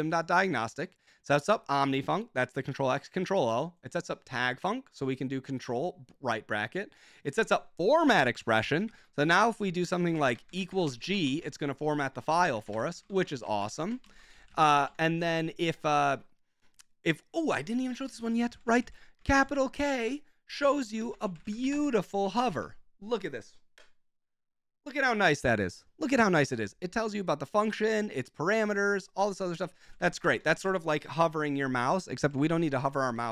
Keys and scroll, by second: 8.1 ctrl+j, 8.9 ctrl+w, 8.9 ctrl+j, 9.0-15.4 typing, 12.2 Escape, 17.9 Escape, 18.2-19.0 typing, 20.7 ctrl+k, 21.0 ctrl+w, 21.1 ctrl+k, 21.3 Escape, 21.3-22.6 typing, 29.7-30.6 typing, 32.0 Escape, 32.4 k, 33.1 j.